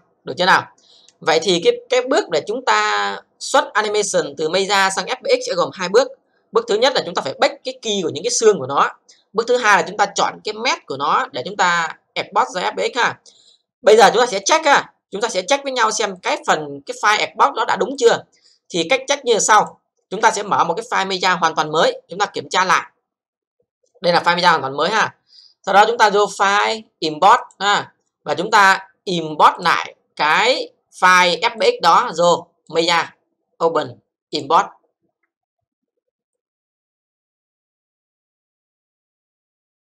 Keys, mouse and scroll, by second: 14.7 click, 16.2 click, 17.9 click, 19.6 click, 26.2 click, 27.3 click, 29.5 click, 32.7 click, 34.3 click.